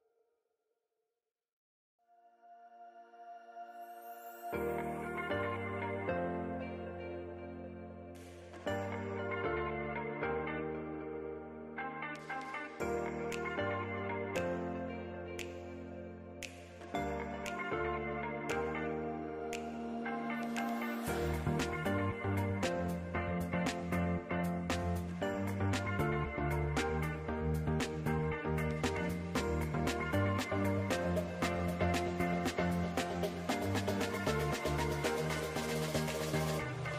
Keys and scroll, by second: 4.2 alt+z, 7.2 alt+w, 10.5 alt+w.